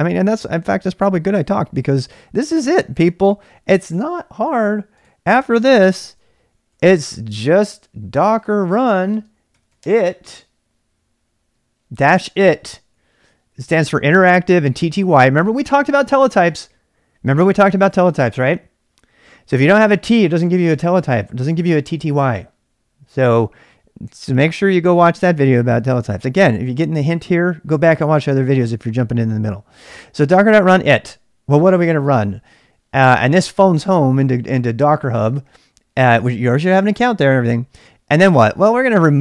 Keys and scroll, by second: 2.6 ctrl+c, 5.9 ctrl+c, 6.4-10.3 typing, 35.9 space, 38.5-39.2 typing.